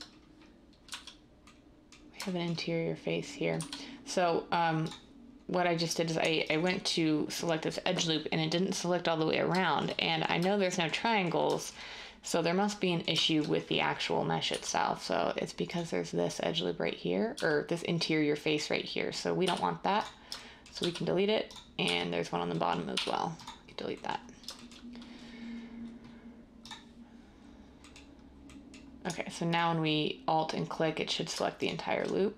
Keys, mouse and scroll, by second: 0.8 z, 3.5 z, 14.4 z, 17.3 z, 19.4 x, 20.8 z, 21.8 z, 22.9 x.